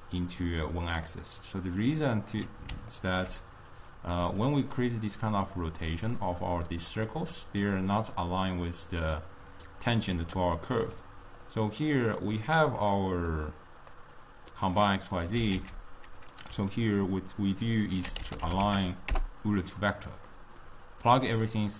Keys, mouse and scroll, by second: 3.0-4.0 ctrl+middle drag, 4.0 click, 4.5-5.5 middle drag, 5.5 click, 6.9 click, 7.2 click, 10.7-11.7 middle drag, 11.7 click, 12.5 click, 13.2 click, 13.5-14.8 drag, 14.8-15.7 middle drag, 15.7 ctrl+a, 21.1-21.7 drag.